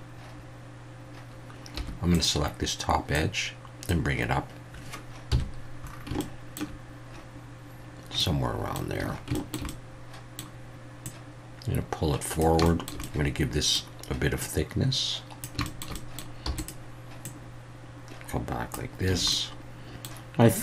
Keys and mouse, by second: 1.7 2, 2.1 click, 3.2 click, 5.3 KP_1, 6.2-6.6 shift+middle drag, 8.3-8.7 middle drag, 9.0 a, 9.3 shift+middle click, 9.7 middle click, 11.1-12.4 drag, 12.7 shift+middle click, 13.1 middle click, 14.5 click, 15.7 shift+middle click, 16.1 middle click, 16.4 e, 16.6 click, 17.2-18.7 drag, 19.1 a, 19.3 middle click.